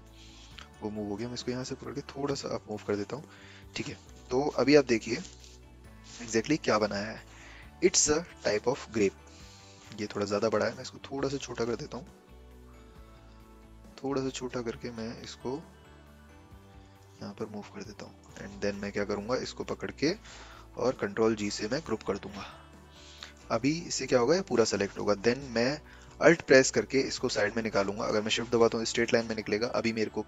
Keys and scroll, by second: 21.2 ctrl+g.